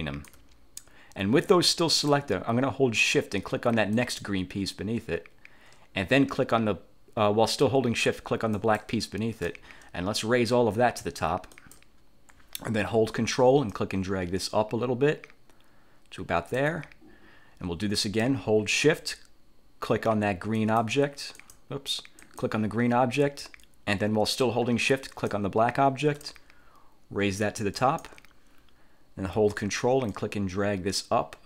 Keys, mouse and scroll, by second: 4.1 shift+click, 8.7 shift+click, 11.7 click, 13.8-16.9 ctrl+drag, 20.7 shift+click, 21.5 shift+click, 22.3 shift+click, 25.1 shift+click, 27.9 click, 30.2-31.4 ctrl+drag.